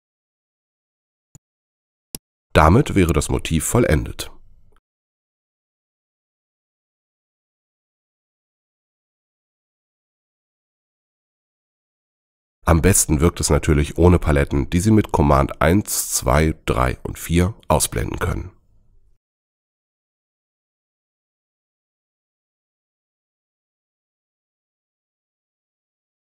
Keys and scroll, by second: 5.3 super+-, 7.5 super+0, 10.0 v, 15.5 super+i, 15.8 super+2, 16.0 super+3, 17.0 super+4.